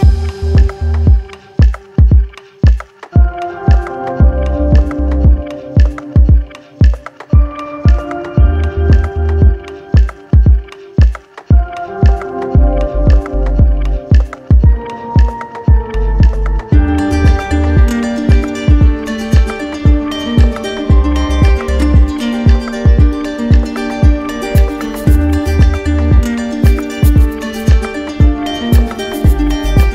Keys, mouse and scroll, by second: 0.0 alt+click, 7.0 click, 8.3 click, 8.8 alt+click, 9.5 alt+click, 12.7 click, 14.7 click, 18.0 alt+click, 18.8 click, 19.2 shift+click, 20.1 click, 21.2 alt+click, 22.3 click, 23.2 alt+click, 27.5 click, 28.7 click, 29.5 click.